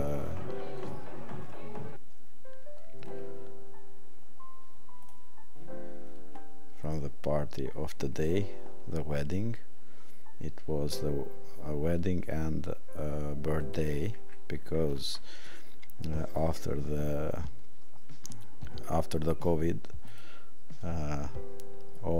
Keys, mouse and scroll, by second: 6.8 click, 8.1 click, 13.6 click.